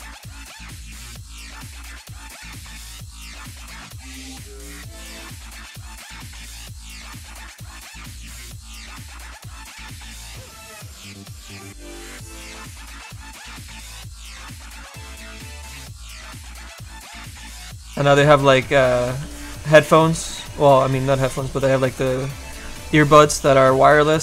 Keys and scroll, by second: 19.2 s, 24.1 s.